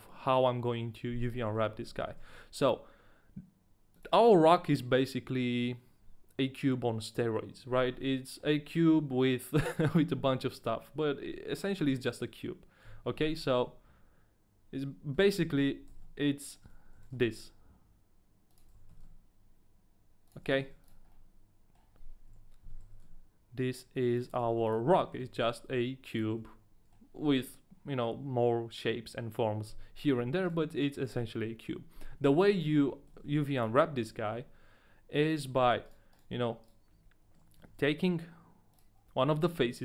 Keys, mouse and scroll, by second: 1.4 middle click, 2.0 middle click, 2.3 middle click, 2.3 shift+a, 8.0 middle click, 12.8 KP_1, 13.6 shift+middle click, 13.6 KP_1, 15.2 Tab, 15.4-17.0 typing, 16.6 Tab, 16.6 ctrl+click, 18.7 Tab, 18.7 ctrl+click, 18.7 z, 18.7 s, 18.7 s, 18.9 z, 20.4 ctrl+click, 20.4 s, 20.4 z, 20.7 ctrl+a, 20.7 ctrl+click, 20.7 s, 20.7 z, 21.1 middle click, 22.3 KP_3, 22.6 s, 22.8 y, 24.3 ctrl+click, 24.3-26.3 typing, 24.6 ctrl+a, 24.6 ctrl+click, 24.9 middle click, 26.3 ctrl+a, 26.3 middle click, 26.3 ctrl+click, 26.5 middle click, 30.3 a, 30.5 right click, 32.4 right click, 32.4 shift+middle click, 32.4 a, 32.5 scroll up 1, 32.6 Tab, 33.3 Tab, 33.3 right click, 33.3 shift+middle click, 33.3 scroll up 1, 34.1 scroll down 1, 34.3 a, 35.3 right click, 36.9 shift+right click, 36.9 scroll down 1, 36.9 a, 37.5 shift+right click, 37.8 ctrl+e, 37.8 shift+right click, 39.1 a.